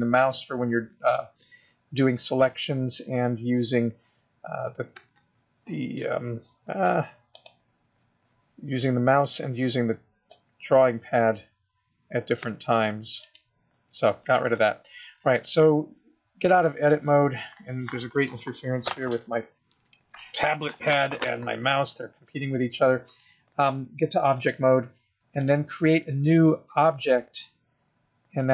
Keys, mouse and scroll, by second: 0.7 click, 5.2 x, 7.6 click, 10.6 click, 12.6 x, 23.3 click, 25.7 click.